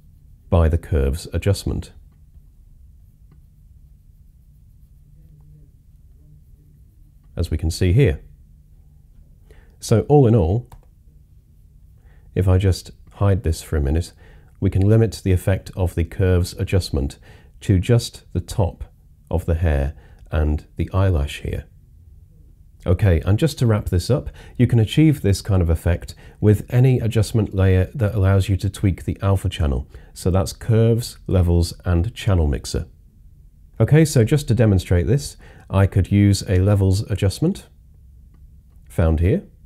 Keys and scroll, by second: 5.0 typing, 8.4 typing, 10.7 typing.